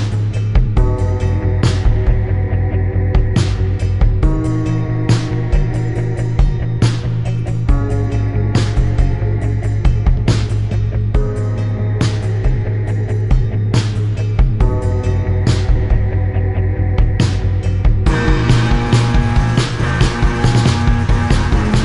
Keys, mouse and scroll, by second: 0.8 click, 2.1 right click, 3.3 click, 6.0 click, 6.6 click, 7.3 click, 7.9 click, 8.9 click, 9.6 click, 10.5 click, 10.8 click, 10.8 right click, 11.1 ctrl+click, 11.9 click, 12.9 shift+click, 15.7 shift+click, 16.6 click, 17.3 click, 18.6 click, 19.1 shift+click, 19.8 click, 20.3 shift+click, 20.8 click, 21.7 click.